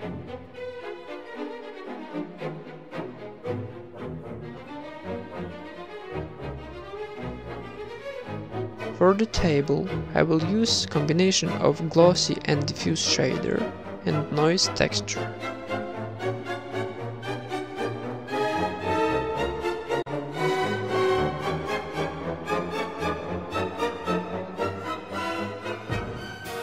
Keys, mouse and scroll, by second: 2.7-3.7 drag, 5.2-6.2 drag, 8.8 click, 9.0 click, 9.4 click, 9.9 click, 10.3 KP_0, 10.5 ctrl+v, 10.7 click, 10.7 shift+a, 11.6 click, 11.8 middle click, 12.2 middle click, 12.9 click, 13.3 middle click, 13.7 click, 13.7 shift+a, 14.1 shift+a, 14.2 click, 15.0 click, 15.5 click, 15.6 right click, 15.6 g, 15.8 g, 15.9 g, 16.0 g, 16.3 click, 16.6 middle click, 16.9 click, 17.2 middle click, 17.4 right click, 17.4 g, 17.5 shift+d, 17.7 middle click, 18.1 click, 19.2 click, 19.5 middle click, 19.8 click, 20.0 shift+d, 20.6 ctrl+s, 20.6 middle click, 20.8 shift+a, 21.6 middle click, 21.7 click, 22.1 click, 23.0-23.5 middle drag, 23.3 shift+a, 24.0-24.5 drag, 24.3 middle click, 24.6 click, 25.2 click, 25.3 middle click, 25.4 a, 25.4 b, 25.5 g, 25.7 middle click, 26.4 click.